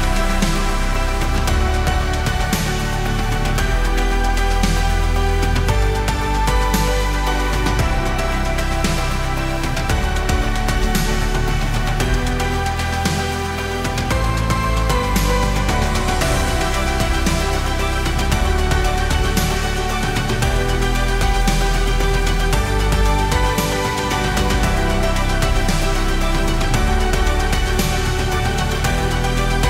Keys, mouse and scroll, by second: 6.9 click, 18.4 0, 18.6 Tab, 18.9 0, 19.7 Return, 20.4-22.7 typing, 21.1 click, 24.3-29.6 drag, 26.5 typing.